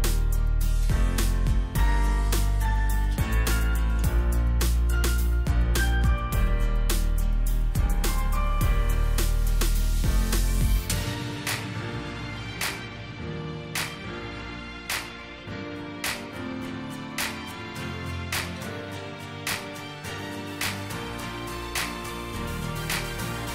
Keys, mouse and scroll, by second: 2.3-2.7 alt+scroll up 1, 4.5 double click, 10.1 alt+scroll up 1, 15.9 scroll up 1, 16.3-16.7 alt+scroll down 1, 17.3 alt+scroll down 1, 22.0 alt+click, 22.3 alt+scroll up 1, 23.2 right click.